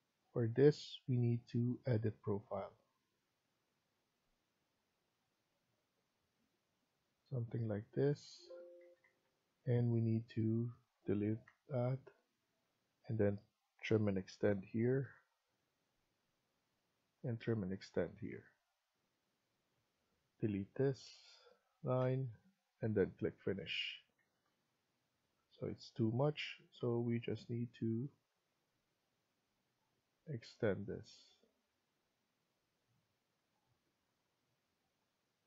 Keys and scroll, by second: 8.7 Escape, 8.9 Escape, 11.3 Delete, 14.3-15.1 typing, 19.6 Escape, 19.9 Escape, 21.9 Delete, 23.8 Escape, 24.1 Escape, 32.9 Escape.